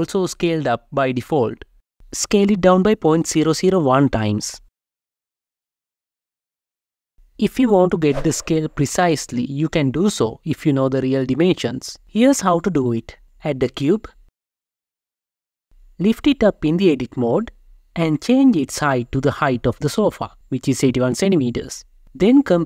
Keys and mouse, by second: 1.0 ., 1.1 Return, 1.1 0, 1.1 1, 3.1-5.3 drag, 5.3 Right, 13.3 shift+a, 15.1 Tab, 15.3 g, 15.6 z, 16.0 1, 16.2 Return, 16.8 Tab, 17.7 n, 19.6-21.4 drag.